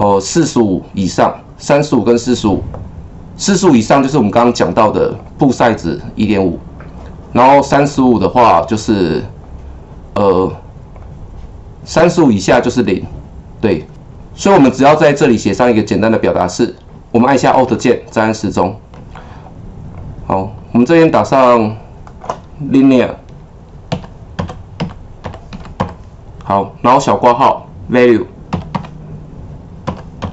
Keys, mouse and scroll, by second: 5.1 click, 7.8 click, 8.5 click, 10.9 click, 12.0 click, 16.7 click, 18.3-23.9 alt+drag, 23.7-26.3 typing, 27.3-30.3 typing.